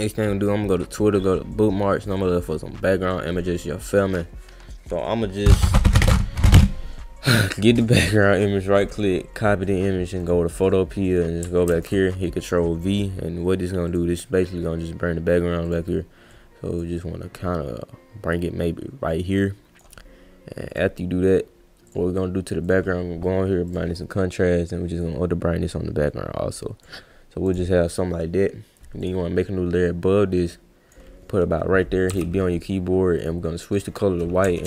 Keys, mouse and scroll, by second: 0.1 click, 3.3 click, 7.8 right click, 10.2 click, 11.1 click, 11.7 ctrl+v, 13.9 click, 15.6 click, 16.3-16.8 drag, 17.0-19.8 drag, 20.7 click, 21.9 click, 22.7 click, 23.7 click, 25.0-26.8 drag, 27.4 click, 29.0 click, 29.9-30.9 drag, 33.2 click.